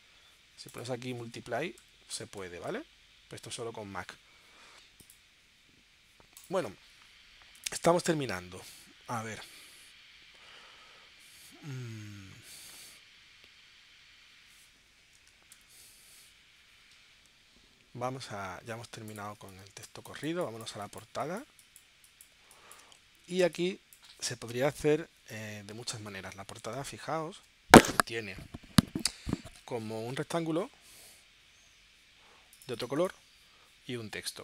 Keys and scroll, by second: 1.6-3.2 typing, 16.0 shift+super+p, 19.3 space, 23.4 space, 27.1 super+Tab.